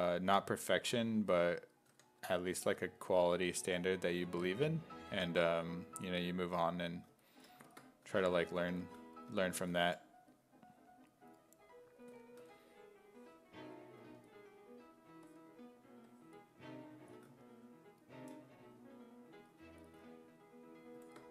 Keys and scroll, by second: 1.9 w, 8.1 s, 8.5 2, 9.6 s, 9.9 5, 12.1 w, 12.4 e.